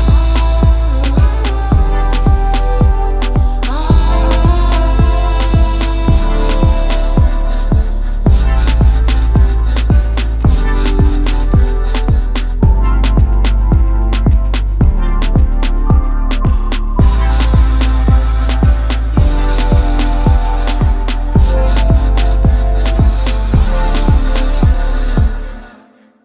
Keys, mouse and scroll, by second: 0.3 click, 1.3 click, 1.5-2.6 scroll, 2.9 click, 3.9 click, 4.4-5.2 scroll, 5.6-5.9 scroll, 6.1 a, 6.9 click, 7.8 alt+middle click, 9.3 click, 10.9 click, 11.7 alt+middle click, 11.9-12.5 scroll, 12.6 middle click, 14.2 click, 14.5-15.2 scroll, 15.7 scroll, 16.2 right click, 16.9 click, 18.1 click, 18.7-19.8 typing, 21.0 alt+middle click, 22.8 alt+middle click, 23.6 ctrl+h, 24.3 middle click, 25.0 click, 25.6 ctrl+h.